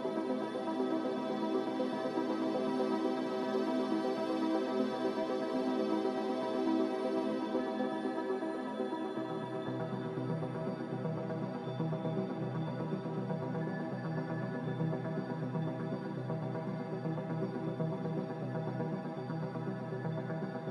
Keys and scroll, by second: 0.8 m, 7.6 ctrl+b, 12.9 x, 13.9 typing, 14.3 Return, 17.1 m.